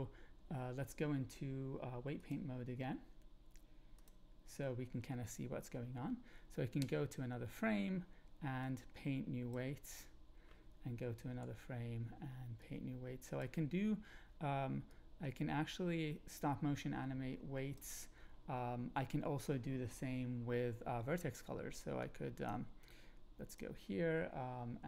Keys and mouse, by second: 2.1-4.1 drag, 6.8 Up, 8.6 click, 11.3 Up, 12.6 click, 14.9-17.7 drag, 22.1 click, 22.8 click.